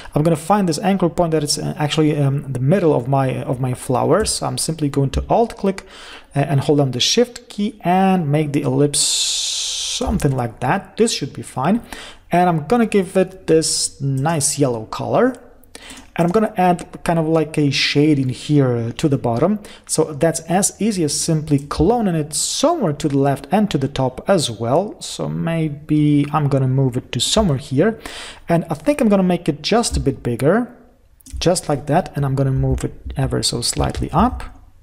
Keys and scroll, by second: 32.0 Left, 33.1 Up, 33.8 Right.